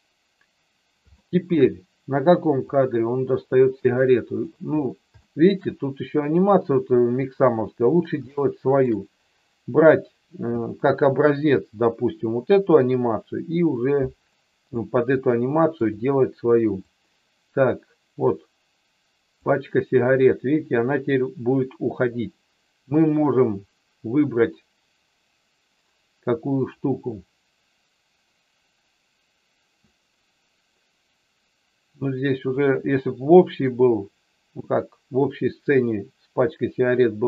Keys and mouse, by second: 1.2 shift+middle click, 2.8-4.5 drag, 5.2 shift+middle click, 8.4 shift+middle click, 15.3 shift+middle click, 17.0-19.5 drag, 32.7-37.2 drag.